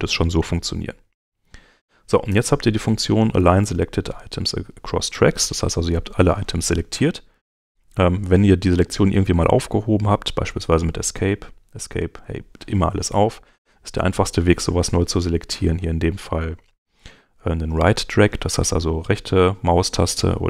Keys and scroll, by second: 6.9 Home.